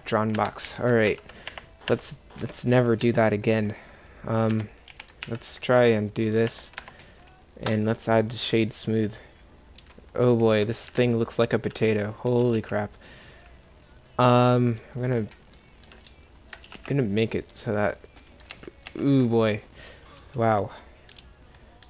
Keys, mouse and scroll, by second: 0.4 Tab, 0.7 a, 1.1 ctrl+r, 2.0 Escape, 2.5 Tab, 4.6 Tab, 5.0 a, 5.3 ctrl+r, 6.6 Escape, 6.9 Tab, 9.9 Tab, 10.6 Tab, 11.0 Tab, 12.5 g, 16.7 g, 18.6 ctrl+z, 19.0 ctrl+z.